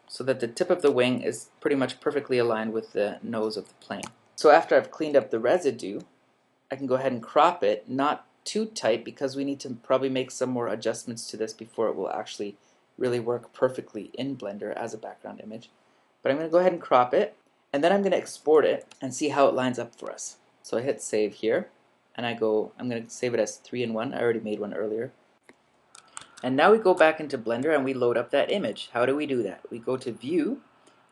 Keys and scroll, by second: 5.4 super+-, 18.4 super+=, 18.9 super+-, 26.2 super+Tab.